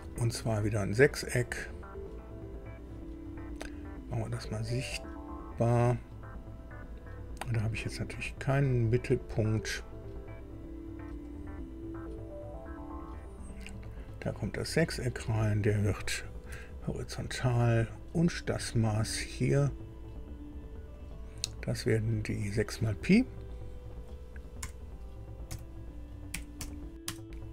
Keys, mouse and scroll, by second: 1.3 click, 4.1 click, 11.2 click, 13.2 click, 13.9 scroll up 2, 14.2 right click, 15.3 click, 16.4 h, 17.7 click, 19.4 click, 20.9 click, 22.3 click, 24.6 6, 26.3 p, 26.6 i, 27.0 Return.